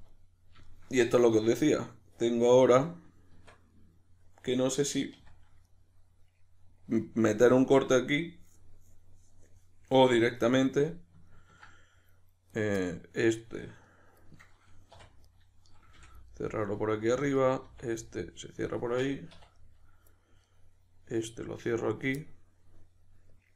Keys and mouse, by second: 1.2 \, 3.3 Tab, 5.2 1, 12.5 right click, 12.8-15.0 middle drag, 15.0 2, 15.2 right click, 16.0 f, 16.3 middle click, 17.2 right click, 17.6 f, 18.0-20.4 middle drag, 19.3 1, 20.4 right click, 22.1-23.5 middle drag.